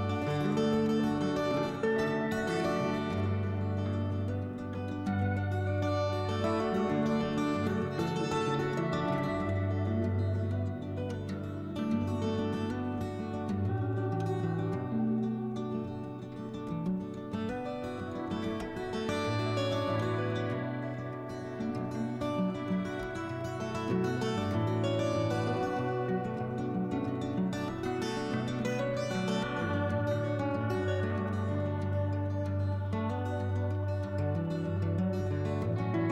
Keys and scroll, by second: 0.5-1.4 typing, 6.9 alt+e, 9.2-10.5 typing, 27.5 4, 34.4 5.